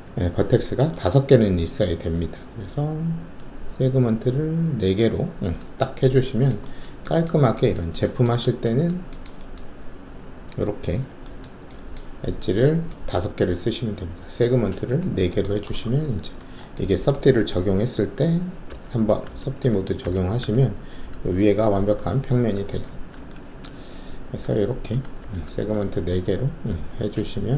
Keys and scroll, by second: 15.8 alt+shift+q, 18.6 3, 20.0 alt+5, 22.8 alt+1.